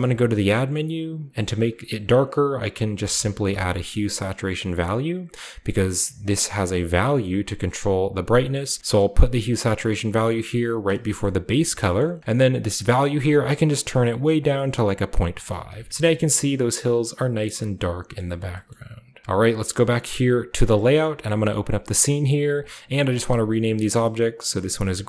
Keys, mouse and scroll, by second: 0.1 typing, 1.3 drag, 2.9-3.4 typing, 4.8 click, 6.3 click, 7.8-10.8 drag, 11.1-14.3 scroll up 1, 13.3-16.3 drag, 15.3-16.0 scroll down 1, 15.6 typing, 16.0 scroll up 1, 17.1 scroll down 1, 17.5-18.0 shift+scroll up 1, 18.0 shift+scroll down 1, 18.1 shift+middle click, 18.2-19.2 shift+scroll up 1, 18.7-19.2 shift+middle drag, 19.8 click, 21.3 click, 22.5 click.